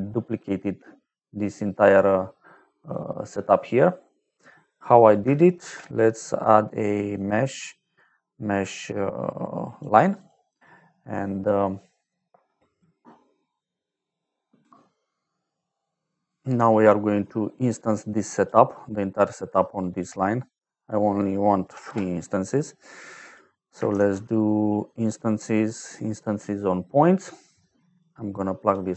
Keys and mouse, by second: 0.8 middle click, 2.4 middle click, 5.0 click, 5.5 shift+a, 7.1 click, 9.6 click, 10.1 click, 10.7 middle click, 17.9 click, 19.0 middle click, 19.7 click, 20.7 click, 21.6 KP_3, 21.8 Return, 23.0 click, 23.5 click, 23.8 shift+a, 25.0 click, 26.1 click, 27.8 click.